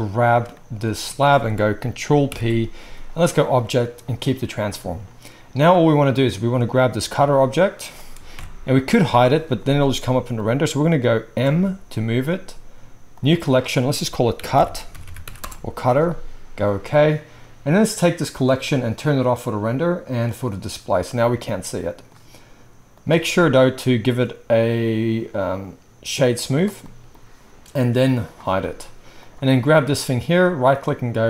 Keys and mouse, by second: 2.2 ctrl+p, 7.1 h, 8.3 alt+h, 13.1 m, 15.0 t, 19.1 click, 19.2-20.5 middle drag, 20.5 click, 20.6-22.9 middle drag, 22.9 click, 23.0-23.8 middle drag, 23.8-31.2 right drag, 28.2 click, 28.2 middle click, 29.2-29.6 drag, 29.2-29.6 middle drag.